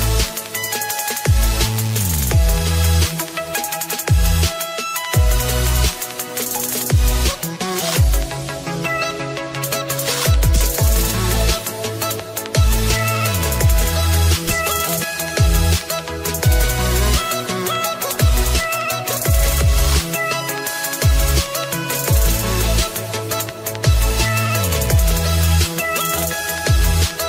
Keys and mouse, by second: 0.0-1.5 typing, 1.5 click, 4.9 click, 6.3 click, 7.2-9.9 typing, 10.0 click, 12.0 click, 13.3-16.3 typing, 17.5 click, 20.5 ctrl+click, 22.1 ctrl+c, 22.1 ctrl+click, 23.8 click, 24.6 click, 24.9 ctrl+v, 24.9 click.